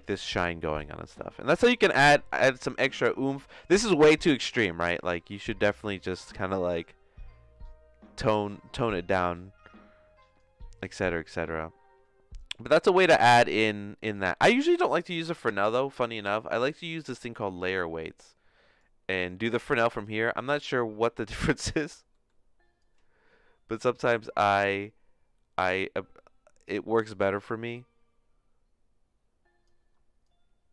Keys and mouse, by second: 3.0 middle click, 4.1 click, 11.1-12.3 drag, 13.6 middle click, 14.1 click, 14.8 click, 15.1 x, 15.5 shift+a, 18.3-19.3 drag, 19.4 click, 20.4-21.4 drag, 22.2 middle click, 22.8-26.8 drag, 27.7-29.6 shift+drag, 30.2-30.7 drag.